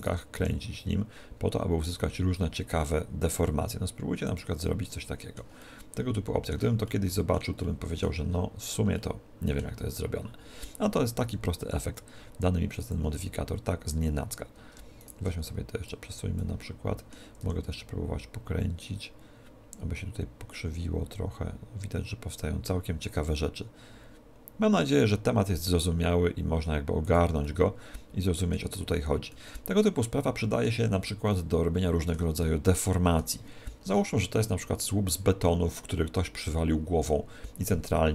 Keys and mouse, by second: 0.1 right click, 0.4 r, 4.4 click, 4.6-12.4 middle drag, 11.4 r, 12.3 r, 12.9 click, 15.1 right click, 16.0 click, 16.6-18.4 middle drag, 17.5 r, 27.2 click, 27.4 middle click, 28.7-34.2 middle drag.